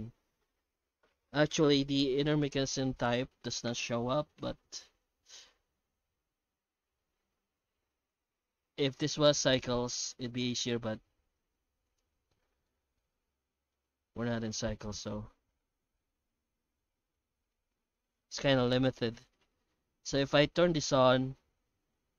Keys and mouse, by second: 9.1 click, 12.3-12.6 middle drag, 12.9-17.5 middle drag, 20.9 click.